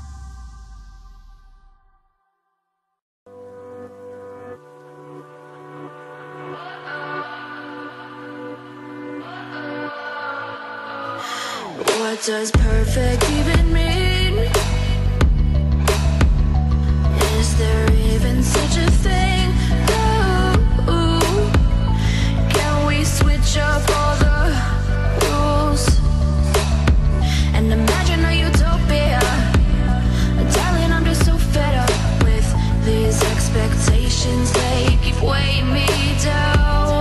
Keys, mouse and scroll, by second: 0.6 middle click, 1.8 right click, 2.4 click, 2.8 click, 3.3 click, 4.1 click, 5.8 click, 6.5 right click, 7.1 right click, 7.7 right click, 8.4 right click, 9.3 right click, 10.2 click, 10.2 w, 10.6 e, 11.2 e, 11.9 e, 13.2 right click, 13.8-18.0 drag, 19.0 r, 20.0 click, 21.6 click, 22.4 click, 23.8 click, 25.0 click, 26.9 click, 27.3 click, 27.8 click, 28.6 click, 30.3 right click, 30.9 click, 36.2 click, 36.8 click.